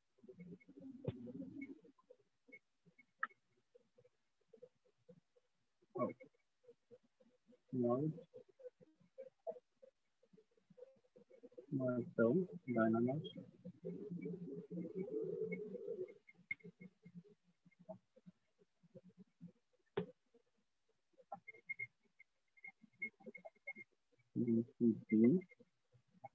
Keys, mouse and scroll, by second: 0.7 ctrl+click, 2.7 click, 3.7 right click, 4.7 shift+click, 7.7 click, 9.7 click, 11.7 click, 12.7 ctrl+click, 13.7 click, 14.7 click, 15.7 click, 16.7 ctrl+click, 18.7 click, 19.7 alt+click, 19.7 right click, 20.8 alt+click, 21.7-24.7 typing, 25.8 click.